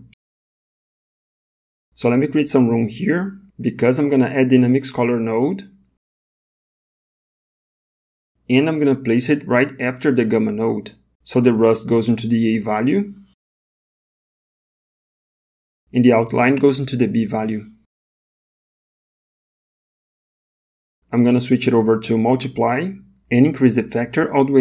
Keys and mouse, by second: 0.4 middle click, 1.5 middle click, 2.1 click, 3.2 g, 5.8 shift+a, 8.4 shift+a, 11.1 space, 16.7-18.6 drag, 19.8 middle click, 21.4-22.9 drag.